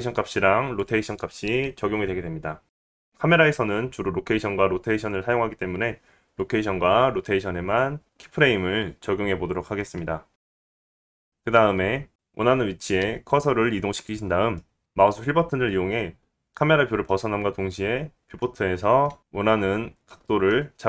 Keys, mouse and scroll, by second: 3.0-6.1 drag, 12.0-14.8 drag, 15.1-18.2 middle drag.